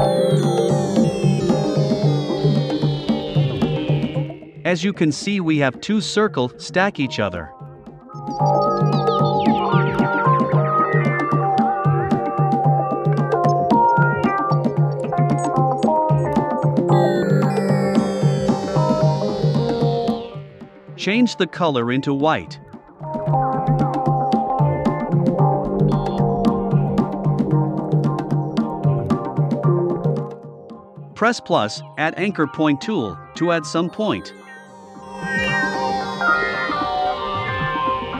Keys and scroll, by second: 3.3 shift+Right, 24.3 shift+Left.